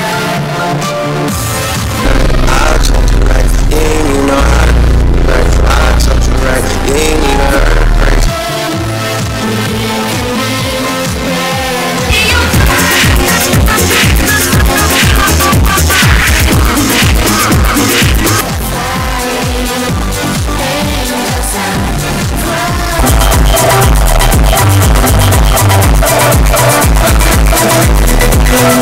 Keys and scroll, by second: 8.2 Page_Down, 18.3 Page_Down.